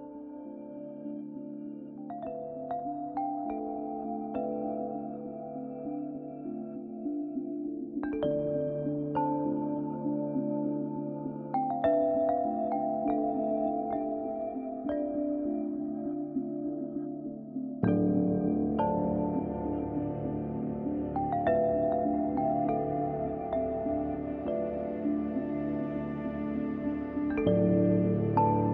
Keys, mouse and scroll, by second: 24.9 click, 25.1 click, 27.1-27.5 scroll down 1, 27.5 scroll up 1.